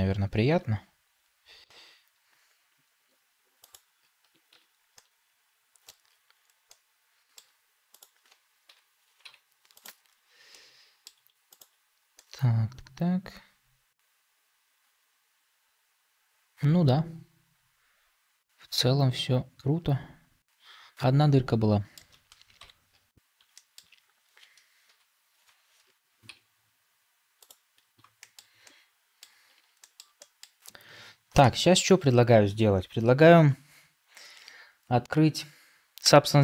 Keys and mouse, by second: 0.5 g, 4.9 middle click, 6.6 middle click, 8.6 KP_Decimal, 9.1 z, 10.4 middle click, 12.0-21.9 middle drag, 22.5 Tab, 23.4 shift+middle drag, 24.8 KP_Divide, 28.1 shift+middle drag, 28.5-29.1 middle drag, 29.7 shift+middle drag, 30.1 middle click, 31.6 ctrl+s.